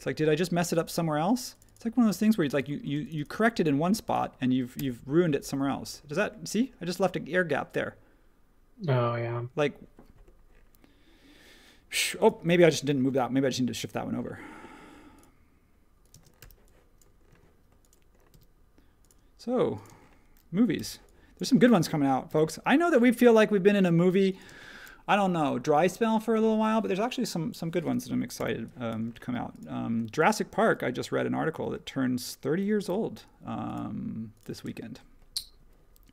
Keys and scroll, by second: 2.0 e, 2.8 space, 4.7 BackSpace, 13.0 m, 16.1 space, 16.4 h, 17.3 space, 18.3 m, 19.8 space, 20.7 h, 21.4 space, 22.2 m, 24.5 space, 28.3 h, 29.0 space, 30.1 space, 32.8 m, 34.6 space.